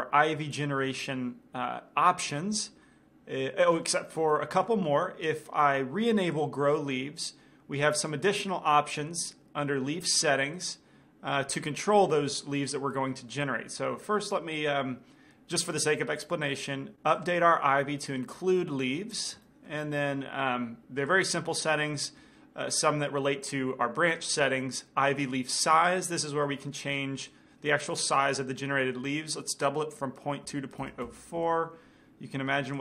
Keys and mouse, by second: 4.2-6.3 middle drag, 6.5-9.0 drag, 14.1-16.0 drag, 18.1-19.2 drag, 18.6-21.2 middle drag, 21.2-23.0 drag, 27.4-29.3 drag.